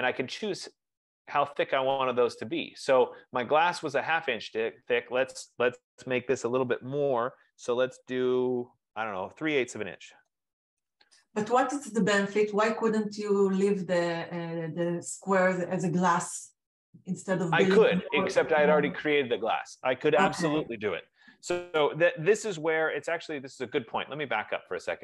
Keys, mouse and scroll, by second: 0.6 F15, 10.3-12.5 typing, 23.2 ctrl+z, 24.6 ctrl+z.